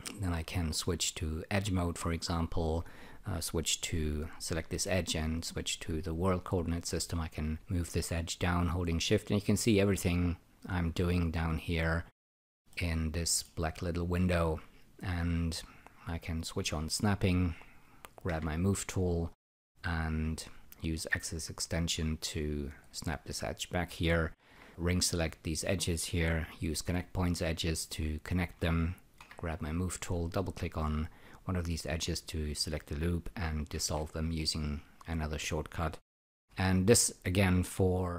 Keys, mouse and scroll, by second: 2.0 click, 5.0 w, 6.7 click, 12.7 alt+middle click, 13.8 alt+click, 16.5 shift+e, 20.3 ctrl+right click, 20.7-22.2 drag, 24.1-25.0 typing, 24.7 click, 25.2 click, 26.8 <, 29.2 e, 30.1 click, 30.3 double click, 33.7 shift+., 36.2-37.0 typing, 37.1 click.